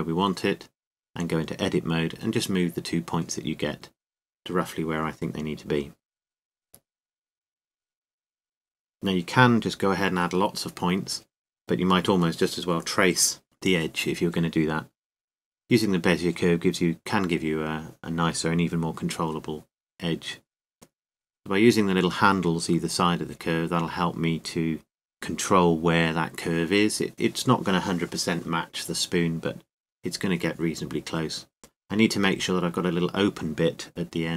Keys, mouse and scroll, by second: 1.8 Tab, 2.8 right click, 4.0 g, 5.6-6.7 drag, 6.7 middle click, 7.5 g, 17.3-20.3 drag, 28.3-30.1 drag, 32.4-34.1 right drag, 33.5 g.